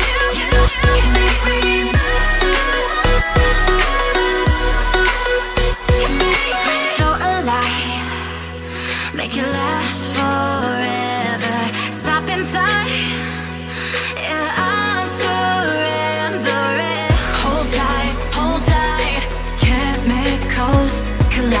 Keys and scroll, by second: 2.0 ctrl+z, 2.7 ctrl+z.